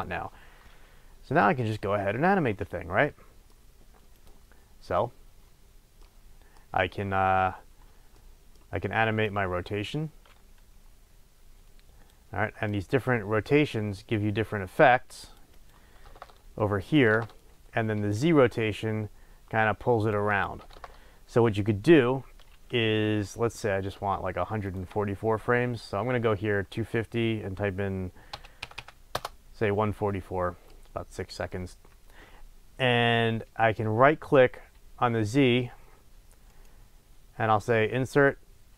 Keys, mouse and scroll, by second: 0.0-3.1 drag, 3.1-4.2 middle drag, 3.8-4.2 scroll down 2, 4.2 click, 6.0-9.2 middle drag, 9.2-21.8 drag, 16.2 Return, 17.1 KP_0, 17.2 Return, 20.8 KP_0, 20.9 Return, 24.6 click, 28.7 KP_4, 29.2 Return, 30.2 click, 30.7-36.5 middle drag, 36.5-38.7 right drag.